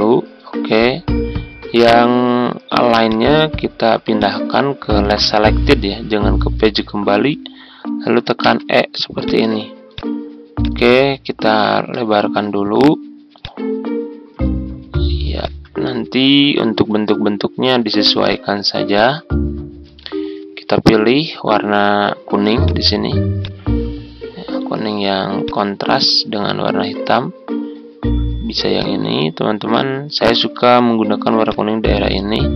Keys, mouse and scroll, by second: 0.6 ctrl+z, 3.0 click, 8.4 e, 9.2 click, 11.4 right click, 11.6 right click, 11.7 right click, 13.3-14.3 drag, 14.6 ctrl+scroll up 1, 15.3 click, 16.2-16.7 typing, 18.2-24.3 drag.